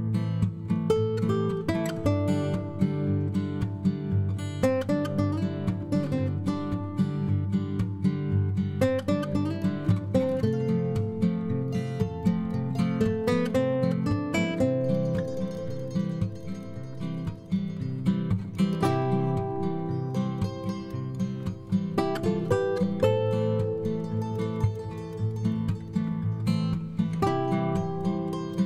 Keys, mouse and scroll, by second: 14.4 5.